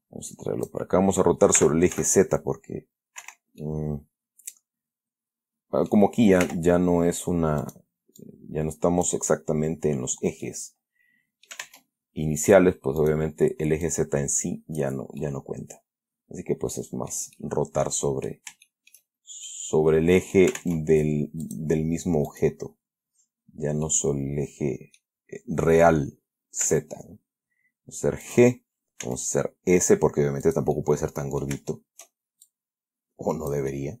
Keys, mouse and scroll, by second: 0.1-1.2 drag, 1.9 r, 2.3 z, 3.5 Escape, 3.9-5.8 drag, 5.8 middle click, 6.7 r, 7.9 click, 8.5-9.6 drag, 10.8-12.0 middle drag, 11.9 ctrl+Tab, 12.7 click, 13.3 right click, 14.2-15.3 drag, 15.5-17.6 middle drag, 18.3 middle click, 19.0 shift+middle click, 19.8-20.9 middle drag, 20.9 ctrl+Tab, 21.8 click, 22.6 right click, 24.2-25.5 middle drag, 25.2 click, 27.0 g, 28.6 click, 29.3 s, 30.8-31.9 drag, 32.0 shift+middle click, 32.8-34.0 shift+drag.